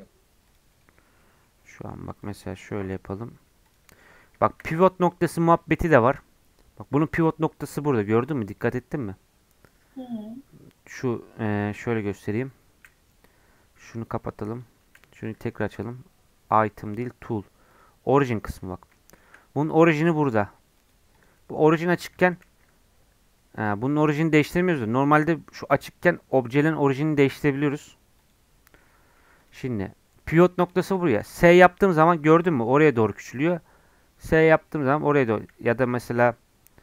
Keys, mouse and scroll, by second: 0.5 click, 0.7 middle click, 1.0 scroll up 1, 1.2 middle click, 1.5 scroll down 1, 1.7 middle click, 2.2 click, 2.8 s, 3.9 scroll up 1, 4.1 middle click, 4.7-5.1 scroll up 4, 5.1-9.6 middle drag, 9.6-10.5 scroll up 8, 12.8 n, 14.5 click, 15.0 n, 15.7-18.1 drag, 18.1-18.5 scroll down 8, 18.9-20.8 shift+middle drag, 20.8-22.2 drag, 22.2 g, 28.2 click, 28.6 scroll down 2, 28.8 middle click, 29.4-30.5 drag, 30.5 middle click, 31.3 s, 35.5 s.